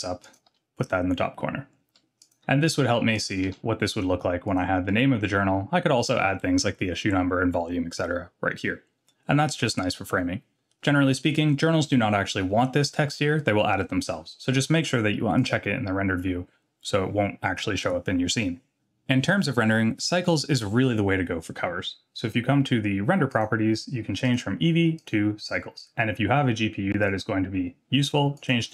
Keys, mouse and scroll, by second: 0.5 g, 3.0 s, 3.4 g, 15.4 click, 23.3 click, 24.2-25.1 drag, 27.0-28.7 drag.